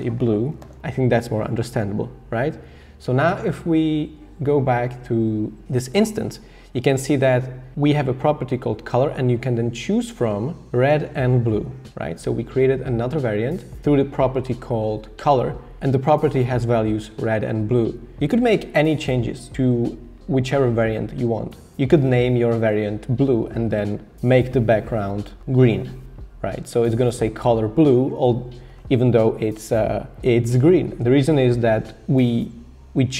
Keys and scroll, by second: 0.2-1.3 typing.